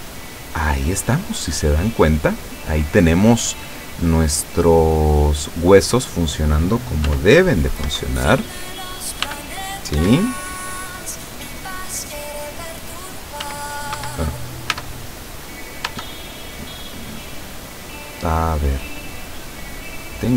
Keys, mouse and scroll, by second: 0.5-2.8 middle drag, 2.9 scroll down 2, 3.8-5.2 middle drag, 6.0 right click, 7.1 r, 7.9 Escape, 8.4 right click, 9.3 r, 10.0 Escape, 10.7 right click, 11.2 right click, 11.6 right click, 12.1 right click, 12.5 right click, 13.5 r, 14.1 Escape, 14.8 Tab, 15.9 Tab, 18.9 middle click, 20.0 right click.